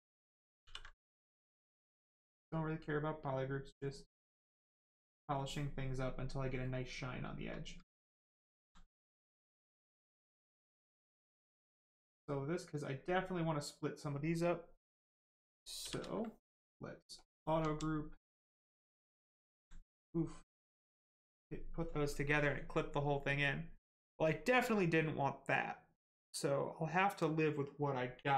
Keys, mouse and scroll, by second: 0.6 ctrl+w, 1.7 click, 4.5 click, 6.0 right click, 8.4 alt+click, 8.9 alt+right click, 10.3 alt+click, 11.5 click, 11.9 right click, 17.1 click, 17.7 alt+right click, 18.0 right click, 18.1 right click, 19.5 alt+right click, 20.0 right click, 20.1 right click.